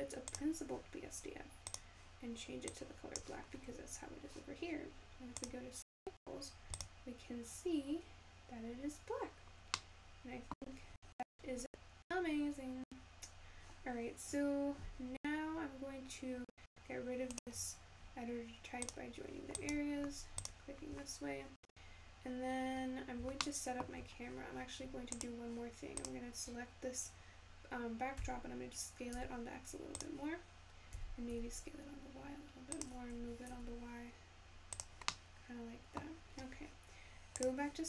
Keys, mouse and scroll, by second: 12.2-14.1 scroll up 2, 34.4 g.